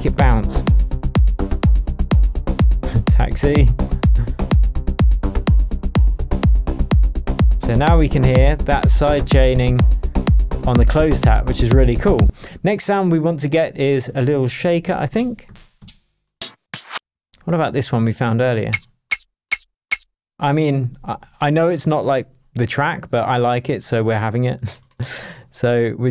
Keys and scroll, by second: 12.2 space, 14.1 Left, 14.4 Right, 14.6 Down, 14.8 Right, 15.1 Down, 15.8 Up, 16.6 Down.